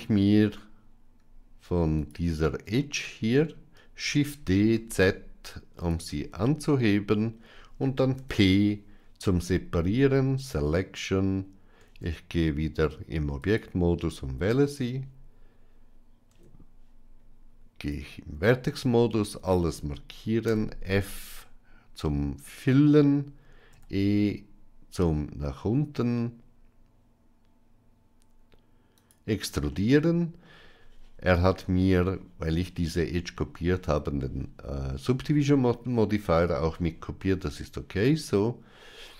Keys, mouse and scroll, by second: 1.9 alt+click, 4.0 shift+d, 6.5 middle click, 8.0 p, 11.7 Tab, 16.2 Tab, 18.5 a, 20.4 f, 23.9 e, 29.6 middle click.